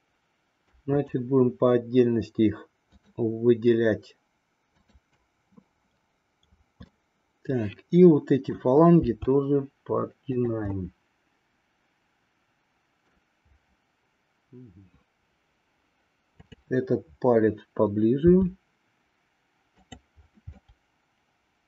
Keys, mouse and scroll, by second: 1.0-2.2 shift+drag, 3.0-4.2 shift+drag, 4.7-6.1 shift+drag, 6.9-8.5 middle drag, 9.0 r, 10.8-13.2 middle drag, 16.2-17.8 drag, 18.1 r, 20.6-21.6 middle drag.